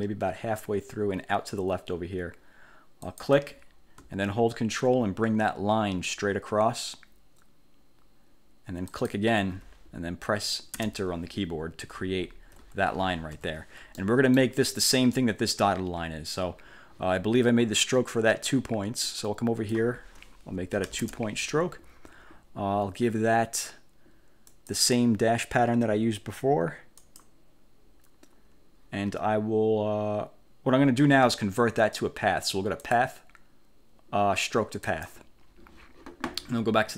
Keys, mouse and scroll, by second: 3.2 click, 9.0 ctrl+click, 10.9 Return, 12.3-12.6 ctrl+scroll up 2, 13.5 1, 14.1 click, 14.4 middle click, 14.4 scroll up 2, 19.4 click, 21.0 2, 21.1 Return, 24.6 click, 27.1 click, 33.0 click, 35.0 click.